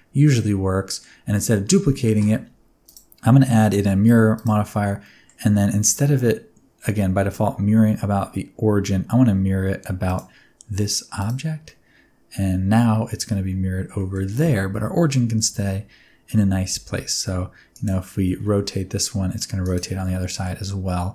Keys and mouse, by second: 0.4 middle click, 1.8 middle click, 2.8-4.4 drag, 5.0 middle click, 11.6-12.7 middle drag, 13.9 middle click, 16.4 r, 16.7 x, 17.7 click, 18.1 r, 18.4 y, 19.6-20.0 right drag, 20.0-20.4 middle drag.